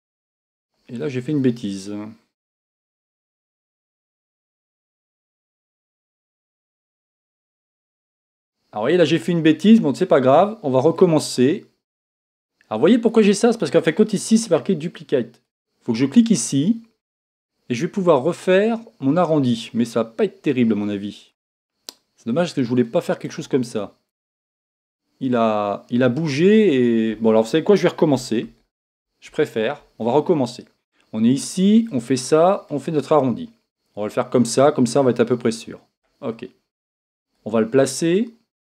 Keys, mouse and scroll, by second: 11.3-13.1 drag, 15.5 click, 18.7-21.3 drag, 22.4 click, 24.3-26.7 drag, 28.5 z, 32.0-36.1 drag, 37.6-38.6 drag.